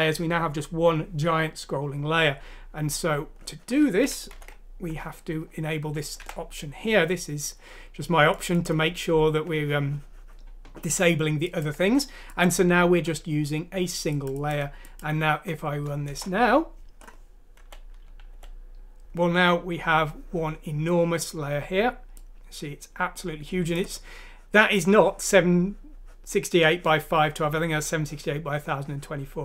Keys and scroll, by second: 4.3 ctrl+Home, 6.2 Delete, 15.4 F6, 16.1 Return, 17.6 End, 18.3 End.